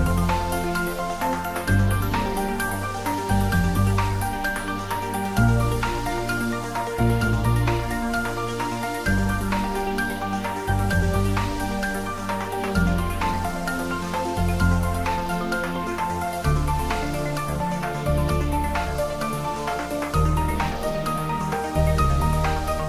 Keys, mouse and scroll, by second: 0.6-1.1 scroll up 1, 1.1-3.3 middle drag, 3.3-4.4 scroll down 1, 5.4 click, 12.1 click, 15.3 click, 17.0 alt+shift+click, 18.2 click, 19.2 alt+shift+click, 22.0-22.6 scroll down 1.